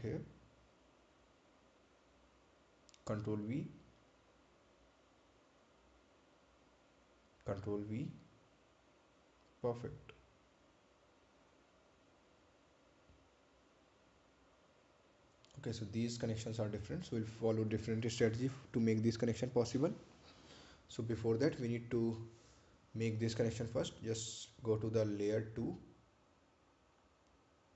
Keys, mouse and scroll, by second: 0.3 ctrl+v, 1.8 click, 3.2-3.8 scroll down 1, 4.4 ctrl+click, 6.0 ctrl+v, 7.5 click, 10.0 ctrl+v, 11.0 click, 18.0 ctrl+click, 19.6 ctrl+click, 20.5 ctrl+click, 24.9 click.